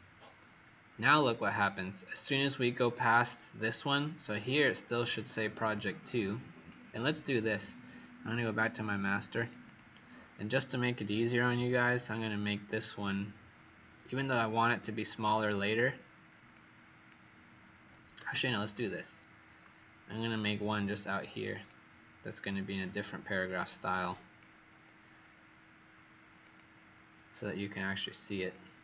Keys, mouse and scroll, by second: 0.9-1.7 scroll down 5, 1.7-4.4 scroll down 6, 4.4-5.0 alt+scroll up 2, 5.7 click, 9.3 click, 9.6 click, 11.5 Escape, 12.1 click, 12.4 Escape, 14.0 click, 18.2 ctrl+z, 18.7 ctrl+z, 20.3 alt+click, 23.3 click.